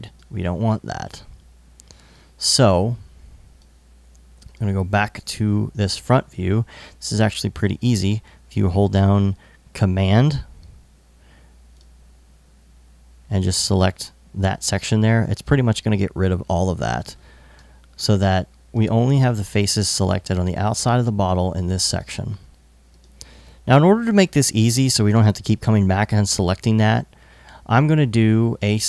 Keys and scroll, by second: 24.5 i, 25.5 alt+i.